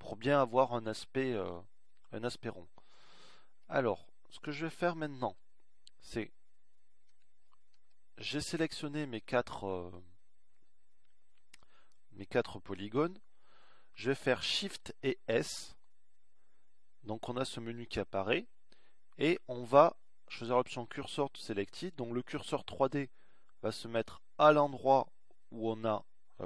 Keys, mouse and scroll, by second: 18.3 shift+s.